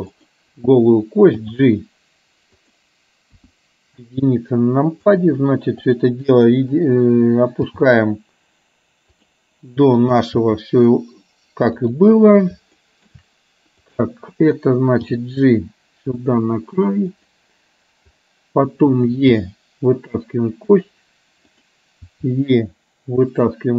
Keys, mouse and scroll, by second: 3.0 g, 3.9 KP_1, 5.9 click, 7.6 g, 10.0 click, 11.2 g, 12.7 shift+middle click, 16.0 g, 20.7 e, 21.5 click, 22.9 e.